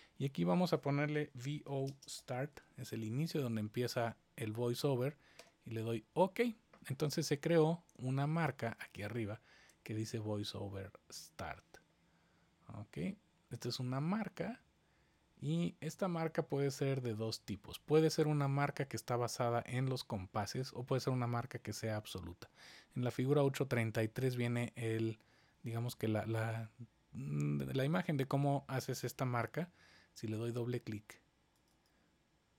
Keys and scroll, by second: 1.1-3.3 typing, 5.3 Return.